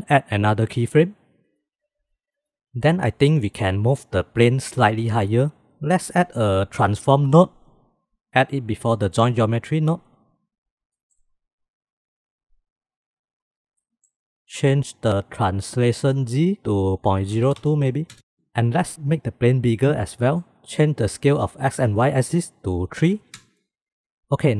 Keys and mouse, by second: 0.1-1.4 drag, 5.6 shift+a, 6.0 shift+a, 10.9-11.5 middle drag, 11.5-12.3 drag, 13.7-14.1 middle drag, 16.8-17.8 middle drag, 17.8 click, 20.2 middle click, 21.2-23.0 drag, 23.5 middle click.